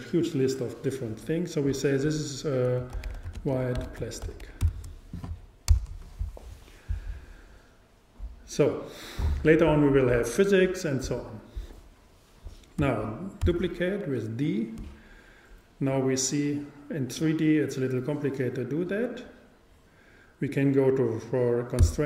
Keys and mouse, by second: 13.5 shift+d.